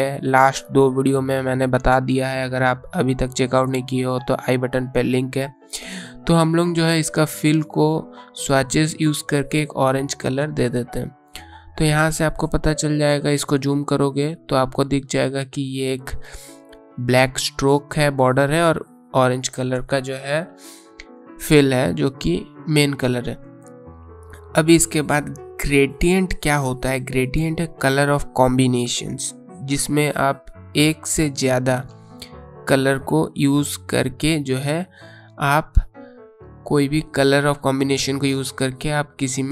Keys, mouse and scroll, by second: 3.8 click, 10.6 click, 16.3 alt+scroll up 1, 18.5-18.8 alt+scroll down 1, 19.8-21.2 scroll down 1, 24.0 click, 25.0-25.7 scroll down 1, 25.7-27.6 scroll up 1, 29.0 click, 33.8 click, 37.9 click.